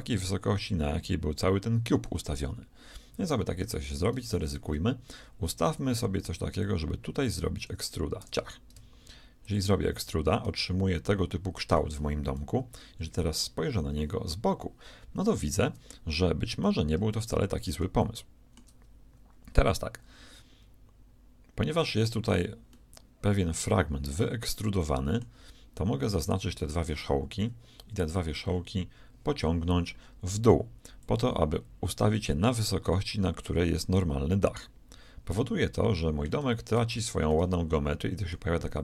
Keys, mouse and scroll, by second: 5.6 a, 5.9 b, 8.2 e, 10.4-12.3 middle drag, 12.5 KP_1, 13.0 KP_3, 16.5-19.7 middle drag, 22.7-24.4 middle drag, 25.3 a, 26.0-27.6 shift+right drag, 27.4 shift+KP_1, 28.4 KP_3, 31.0-32.9 drag, 34.6-36.4 middle drag, 36.9 z.